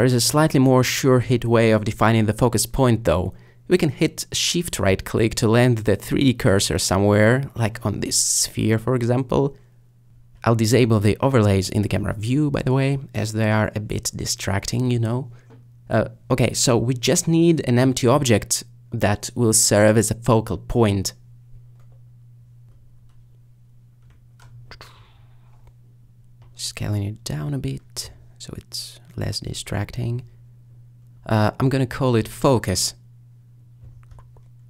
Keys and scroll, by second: 17.4 a, 24.3 s, 26.2 g, 33.5-33.9 typing, 34.0 Return.